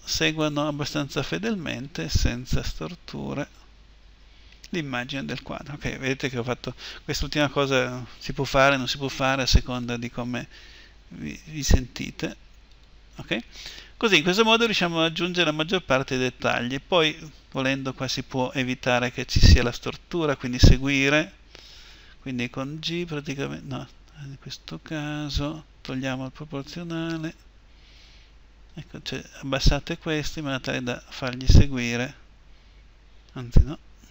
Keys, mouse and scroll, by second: 1.6 click, 1.6-3.7 right drag, 2.4 g, 3.7-5.9 middle drag, 9.2-11.3 right drag, 10.2 g, 20.3-22.4 right drag, 22.4 g, 27.0-28.9 right drag, 27.0 o, 27.8 g, 30.6-33.4 middle drag, 33.4 a, 34.0 a.